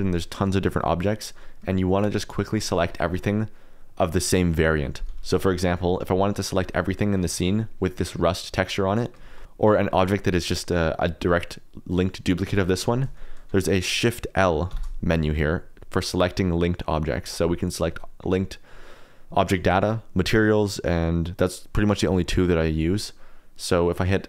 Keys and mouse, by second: 1.4 middle click, 1.9 click, 2.4 shift+middle click, 2.9 shift+click, 3.0 shift+middle click, 3.1-5.2 middle drag, 5.5 shift+middle click, 5.6 shift+click, 5.7 middle click, 6.7 middle click, 7.2 shift+middle click, 8.5 middle click, 9.2 shift+middle click, 11.1 middle click, 14.6 shift+l.